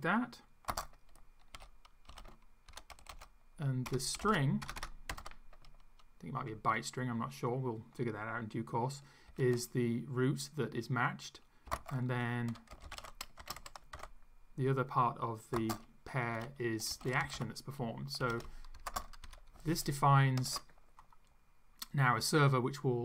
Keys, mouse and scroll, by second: 0.7-5.8 typing, 9.3 shift+', 11.6-14.5 typing, 15.6-19.0 typing, 18.8 Right, 19.2 Up, 20.4 ctrl+s.